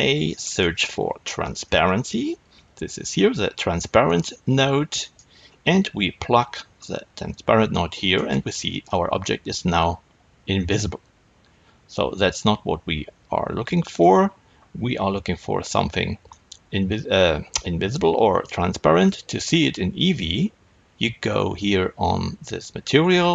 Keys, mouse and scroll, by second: 8.1-8.8 drag, 8.8-23.3 middle drag.